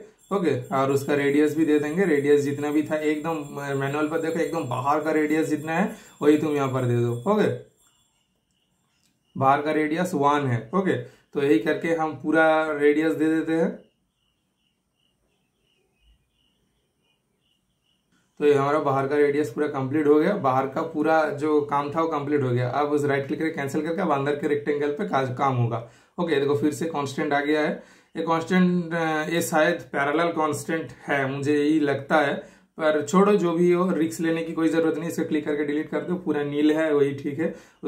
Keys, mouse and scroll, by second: 8.9 super+Return, 12.9 super+click, 14.6 typing, 17.4 super+Return, 19.0-22.2 super+middle drag, 19.0 typing, 22.0-22.7 typing, 22.2 super+click, 22.6 super+right click, 23.3 super+click, 28.3 super+click, 28.3 typing, 28.9 super+scroll up 1, 29.4 super+scroll down 1, 30.3 super+click, 32.5 super+Delete, 33.0-33.3 super+scroll down 1, 33.5 super+scroll up 1, 34.3 super+scroll down 1, 34.6 super+scroll up 1, 35.9 typing.